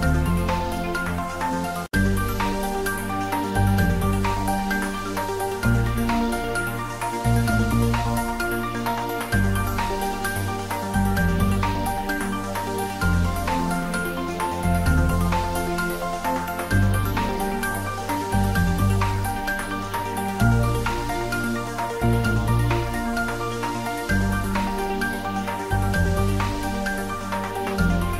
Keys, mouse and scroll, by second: 0.1-1.9 ctrl+middle drag, 1.9-3.9 drag, 3.9 x, 5.4 click, 6.7 ctrl+z, 7.3 x, 8.3 click, 8.8 Tab, 9.3 shift+z, 9.9 ctrl+middle click, 10.4 ctrl+z, 12.2 shift+z, 12.8-14.7 drag, 14.7 x, 15.1 click, 15.5 Tab, 15.8 ctrl+middle click, 16.8-18.6 typing, 17.9 click, 19.1 click, 20.0-20.9 typing, 21.3 click, 21.8 Tab, 22.5 click, 23.2 Tab, 24.0 click, 24.6 Tab, 24.9-28.1 drag.